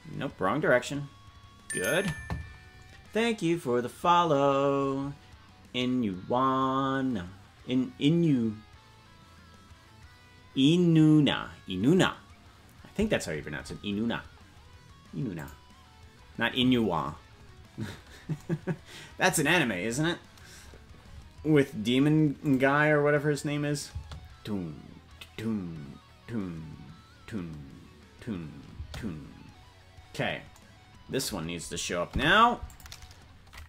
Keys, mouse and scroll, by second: 15.4 click, 21.4-22.1 scroll down 1, 22.5 click, 22.5 scroll down 4, 23.9 space, 32.1 i.